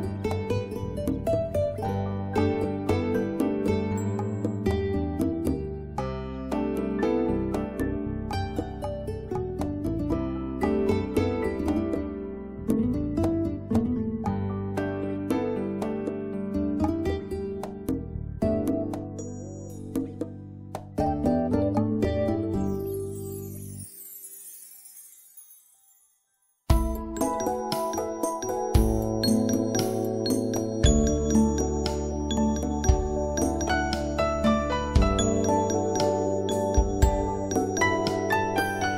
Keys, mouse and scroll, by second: 11.3 click, 12.9 right click, 13.2 click, 15.3 right click, 15.5 click, 17.2 right click, 17.4 click, 23.2 click, 24.7 right click, 24.9 click, 27.2-30.4 typing, 32.4 click, 33.6 5, 34.0 Return, 35.5-36.0 scroll up 1, 37.7 scroll up 1, 38.0-38.6 scroll down 1.